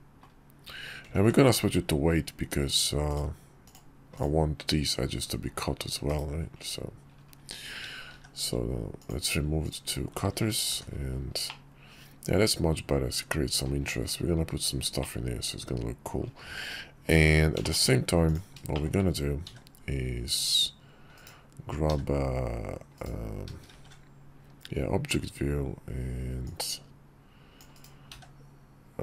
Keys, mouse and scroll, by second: 0.9 ctrl+`, 5.8 /, 7.8 shift+2, 8.8-9.4 drag, 10.4 h, 11.2-13.4 middle drag, 14.7-15.8 middle drag, 17.3 `, 17.3 shift+middle click, 18.4 shift+middle click, 19.2 d, 21.6 d, 23.4 shift+v, 26.2-27.3 drag, 27.8 d.